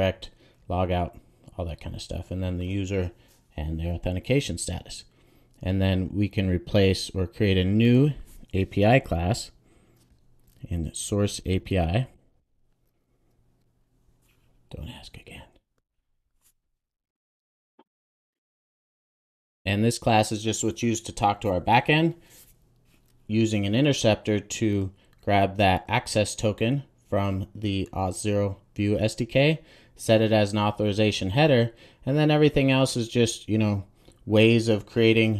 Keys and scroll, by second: 8.9 super+n, 18.5 Return, 18.9 super+s, 22.2 super+s.